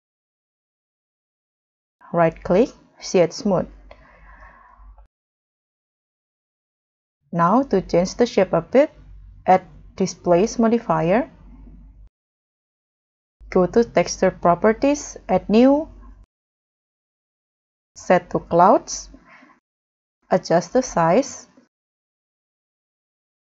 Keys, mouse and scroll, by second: 0.2 middle click, 0.5 scroll down 4, 0.9 scroll up 2, 1.1 middle click, 2.2 right click, 4.1 scroll up 2, 6.5 scroll down 3, 8.6-9.4 scroll up 5, 11.2 scroll up 1, 11.3 scroll down 3, 12.4 scroll down 4, 18.9 scroll up 2, 19.6-20.5 scroll down 9.